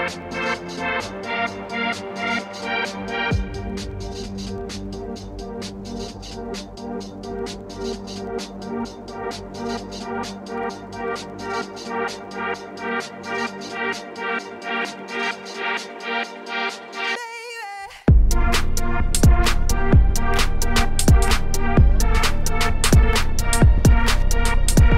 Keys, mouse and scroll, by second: 0.0 g, 1.1 ctrl+b, 2.5 alt+click, 3.5 alt+click, 3.9 alt+shift+click, 4.2 shift+middle click, 4.4 scroll up 3, 4.5 middle click, 4.8-5.1 scroll down 1, 5.1 ., 5.8 s, 6.9 2, 7.1 alt+click, 7.9 alt+shift+click, 9.2 ctrl+r, 9.8 ctrl+r, 10.3 2, 10.6 alt+shift+click, 11.0 g, 12.0 ctrl+b, 12.7 2, 13.0 alt+click, 13.8 s, 14.6 2, 14.9 alt+click, 15.3 alt+shift+click, 15.7 g, 17.2 scroll down 1, 17.4 Tab, 17.5 click, 17.6 shift+middle click, 18.5 click, 18.7 Tab, 18.8 a, 19.0 s, 20.8 Tab, 20.8 click, 20.9 middle click, 21.1 scroll up 1, 21.3 shift+middle click, 21.5 Tab, 21.6 middle click, 21.8 3, 21.9 click, 22.0 g, 22.9 i, 23.5 e.